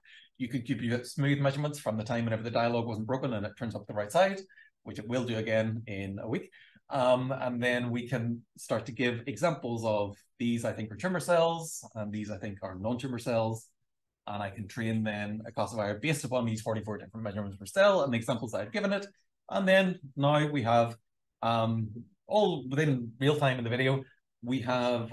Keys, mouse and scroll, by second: 5.9 d, 6.8-7.5 shift+scroll up 2, 7.6 b, 7.9 click, 8.3 Right, 10.1 click, 10.5 shift+right click, 11.9 super+l, 13.5 space, 17.5 click, 18.3-19.6 shift+scroll down 4, 21.7 click, 22.4 click, 23.6 super+l.